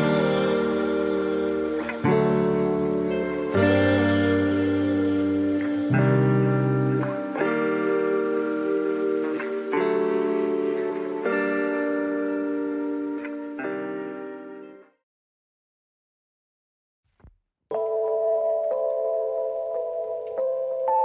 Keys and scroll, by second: 0.7 space, 9.7 ctrl+=, 9.8 ctrl+-, 10.3 ctrl+=, 20.5 ctrl+=, 20.7 ctrl+-.